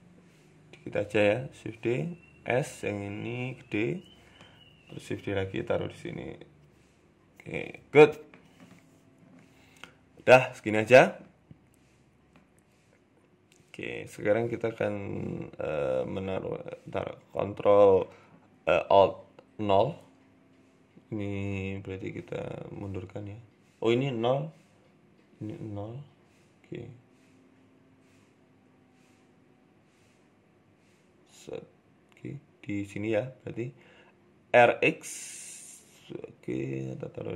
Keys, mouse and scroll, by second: 0.0 g, 1.0 shift+d, 1.6 r, 2.8 s, 4.8 g, 4.8 shift+d, 5.4 r, 7.7 g, 7.9 middle click, 8.4 scroll down 3, 8.4 scroll up 1, 8.8 shift+middle click, 9.1 Tab, 9.2 middle click, 9.7-10.8 scroll down 4, 10.4-10.8 scroll up 3, 10.8 scroll down 1, 12.5-13.0 scroll up 3, 13.0 shift+middle click, 14.8 right click, 15.3 s, 16.3 KP_1, 16.8 scroll up 6, 18.4 ctrl+alt+KP_0, 19.1-19.8 scroll down 9, 19.8 right click, 19.8-20.2 scroll down 1, 21.5 g, 23.4 click, 25.0 click, 27.3 g, 28.7 g, 32.2-32.6 scroll up 4, 32.5 shift+middle click, 33.0 r, 34.6-34.9 scroll up 2, 34.9 g, 36.4 g.